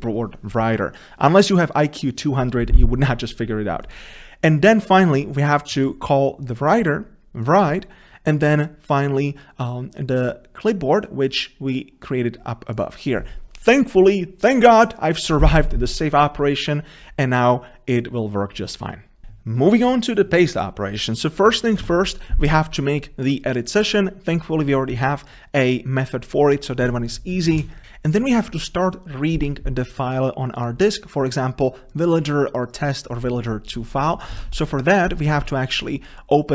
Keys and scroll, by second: 34.5 ctrl+v.